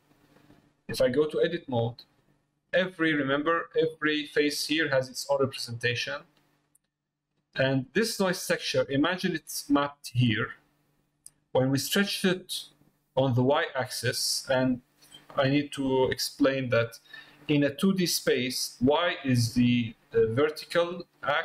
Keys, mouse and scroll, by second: 2.1 click, 3.9 click, 6.9 middle click, 13.9 middle click, 15.1 middle click, 16.1 middle click.